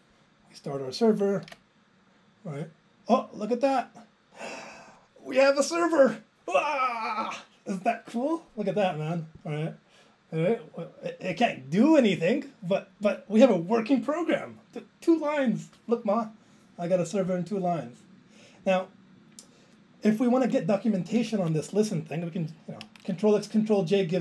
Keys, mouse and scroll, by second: 12.0 click, 13.0 click, 13.3 click, 17.2 click, 19.1 click, 21.2 Left, 21.4 Right.